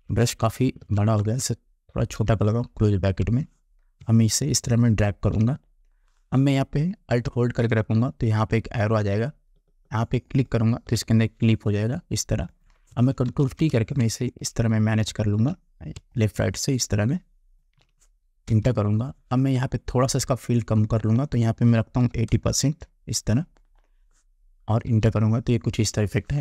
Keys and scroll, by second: 1.0 ctrl+z, 2.4 [, 13.4 ctrl+t, 18.6 Return, 22.1 8, 22.4 0, 25.0 Return.